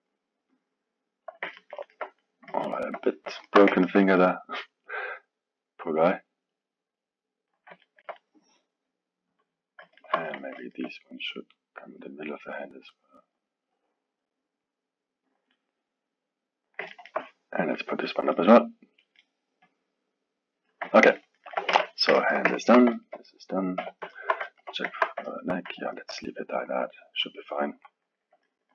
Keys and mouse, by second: 0.6 click, 1.6-5.1 ctrl+middle drag, 5.1 click, 6.2 click, 7.8-11.4 ctrl+middle drag, 11.4 click, 12.9 click, 13.8-15.5 drag, 15.5-19.7 middle drag, 19.7 click, 21.0 ctrl+middle click, 21.7 KP_1, 22.2-23.8 ctrl+alt+middle drag, 23.8 KP_3, 24.1-28.7 alt+middle drag.